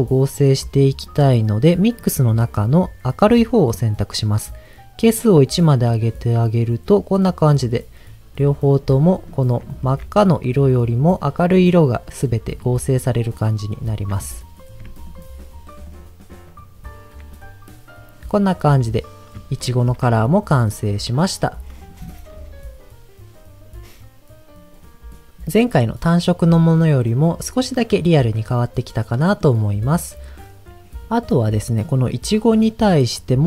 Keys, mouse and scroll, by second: 0.6 middle click, 1.0 scroll up 2, 1.8-4.0 drag, 5.2 click, 8.7 scroll down 1, 9.1 middle click, 9.7 ctrl+shift+click, 10.9 scroll down 1, 12.0 middle click, 13.4 ctrl+shift+click, 14.3 scroll down 1, 15.0 ctrl+shift+click, 15.8 ctrl+shift+click, 19.6 ctrl+shift+click, 20.4-21.6 scroll down 2, 26.5-27.8 middle drag, 28.2-29.4 middle drag, 29.7 scroll up 1, 31.3 middle click, 31.7 scroll up 1.